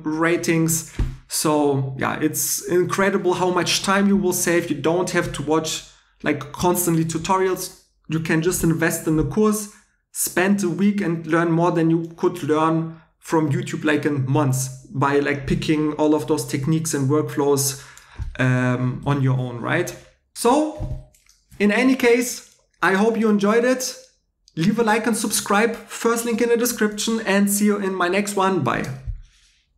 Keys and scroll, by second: 19.0 super+w.